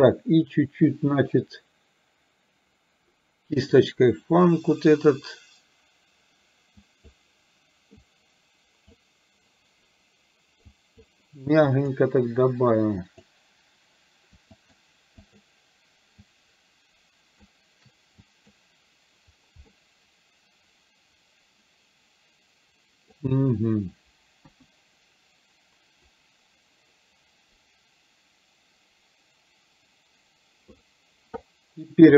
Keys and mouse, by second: 3.8 click, 6.8 click, 8.0 click, 10.8 click, 11.8 click, 13.2 click, 14.7 shift+click, 15.3 shift+click, 16.2-17.4 shift+drag, 18.3 click, 19.7-23.3 middle drag, 24.4 KP_1.